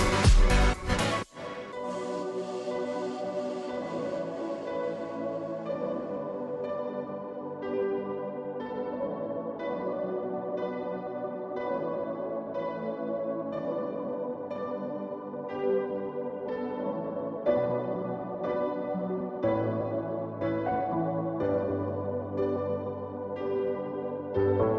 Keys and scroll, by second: 3.0 ctrl+t.